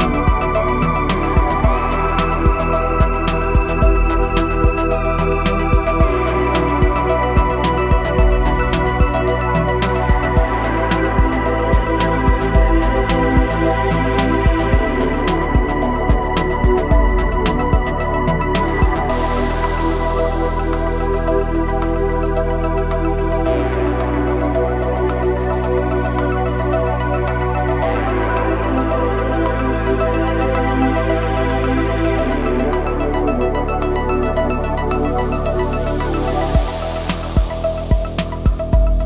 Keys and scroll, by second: 6.9 ctrl+shift+b, 12.6 ctrl+shift+b, 19.0 ctrl+shift+b, 23.8 ctrl+shift+b, 30.5 ctrl+shift+b, 34.7 ctrl+shift+v, 35.5 ctrl+shift+b.